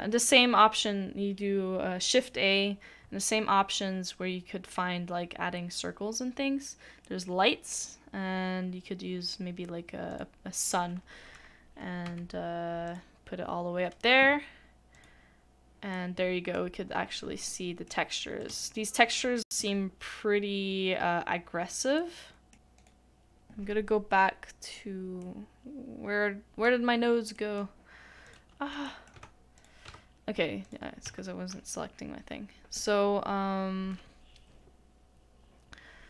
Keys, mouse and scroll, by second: 4.0 a, 11.7 middle click, 12.2 g, 19.0 shift+middle click, 22.0 middle click, 29.9 Tab.